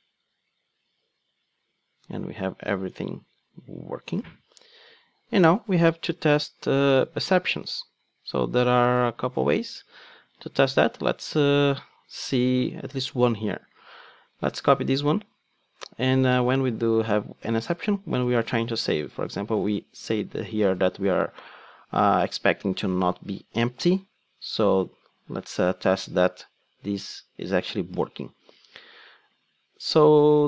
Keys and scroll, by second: 15.0 super+c, 18.2 super+v, 18.9 ctrl+Tab, 23.8 ctrl+Tab.